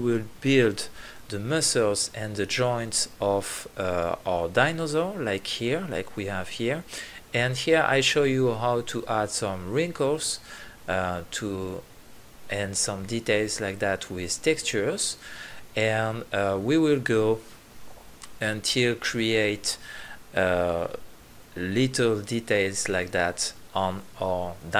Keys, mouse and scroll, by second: 0.5-1.7 middle drag, 1.7 click, 1.9 middle click, 2.0 click, 2.1-2.9 middle drag, 2.9-3.8 drag, 3.8-5.0 middle drag, 5.3 click, 5.9 middle drag, 6.1 click, 6.2 middle click, 7.4 middle click, 7.7 click, 8.0-8.4 middle drag, 9.0-9.8 middle drag, 11.0-11.6 middle drag, 12.1-13.2 middle drag, 14.6-15.2 drag, 15.4-17.8 drag, 17.8-19.0 middle drag, 19.0 click, 19.1 middle click, 19.2-21.9 middle drag, 22.1 middle click, 22.4 middle click, 23.0 click, 23.4 click, 23.5 click, 23.7 middle click, 24.0 click, 24.2 middle click.